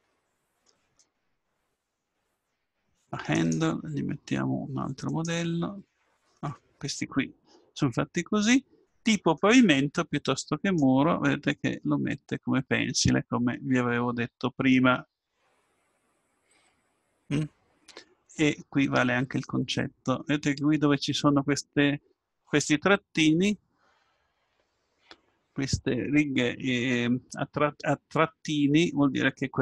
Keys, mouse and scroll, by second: 2.3 click, 3.3-5.3 drag, 9.3-11.6 drag, 11.6 middle click, 28.3 middle click, 29.1-29.6 middle drag.